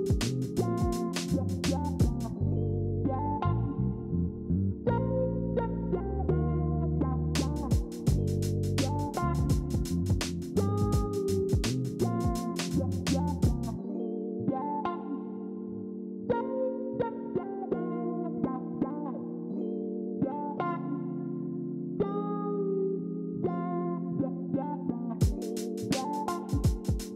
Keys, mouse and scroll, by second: 8.0 ctrl+4, 10.3 ctrl+z, 21.2 ctrl+z.